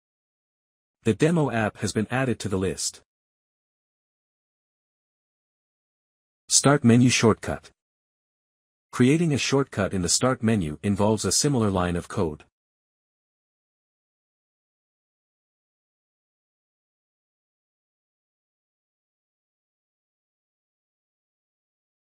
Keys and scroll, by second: 11.5 Return, 11.8-18.4 typing, 14.0 Left, 18.5 Right, 19.5-22.0 typing, 19.7 Return.